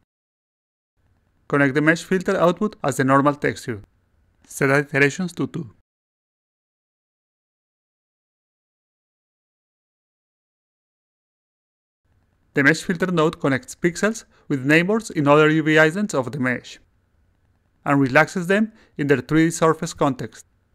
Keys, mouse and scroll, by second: 2.4 click, 5.8 click, 7.0-9.2 alt+drag, 9.8 click, 10.6 click, 11.2 click, 11.8 click.